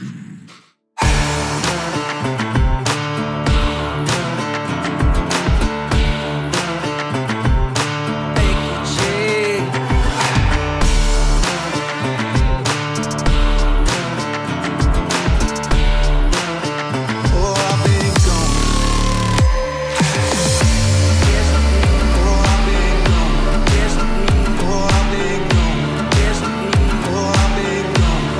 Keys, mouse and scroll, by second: 1.3 typing, 17.9-19.1 typing, 19.9 click.